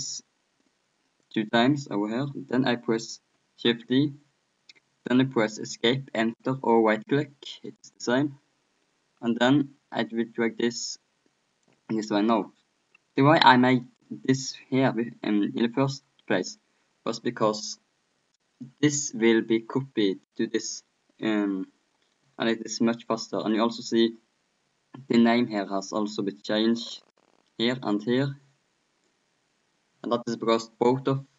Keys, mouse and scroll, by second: 2.1-3.8 middle drag, 9.5-11.4 drag, 13.8-15.4 right drag, 15.6-20.7 middle drag, 20.7-25.3 right drag.